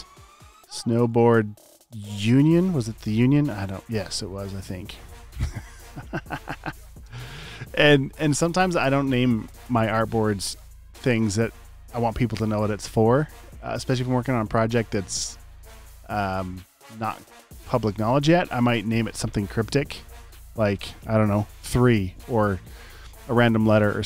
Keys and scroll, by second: 0.9-1.6 typing, 7.0 space.